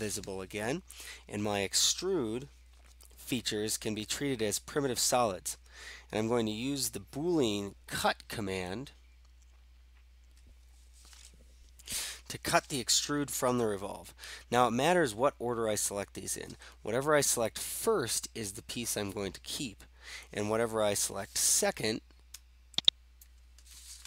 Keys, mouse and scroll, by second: 22.9 ctrl+click.